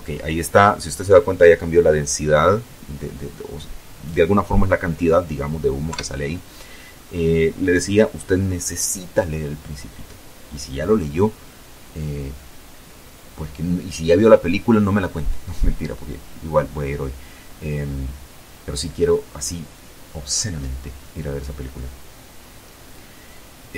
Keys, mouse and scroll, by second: 3.6 F12.